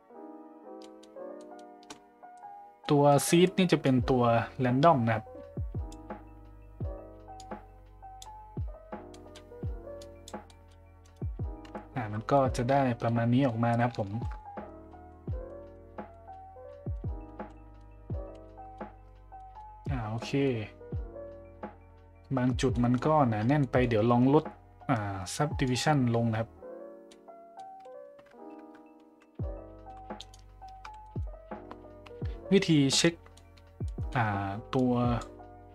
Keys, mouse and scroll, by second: 0.8 middle drag, 1.4 middle click, 2.8 middle drag, 3.9-5.9 drag, 7.4 click, 9.1 middle click, 10.0 click, 10.4 middle drag, 11.6 KP_Decimal, 11.9 a, 12.3 middle drag, 13.0-13.4 middle drag, 13.7 shift+middle click, 14.1 shift+z, 14.3 middle drag, 14.9 middle drag, 15.4 middle drag, 16.1 middle drag, 16.7 middle drag, 17.5 middle drag, 17.5 z, 18.4-18.7 middle drag, 19.3 middle drag, 20.1 middle drag, 22.7 middle drag, 23.6 middle click, 25.6 click, 27.1-27.5 middle drag, 28.6 Tab, 29.1 z, 29.8 z, 31.1 middle click, 33.0 middle click, 33.9 middle click, 34.8 click.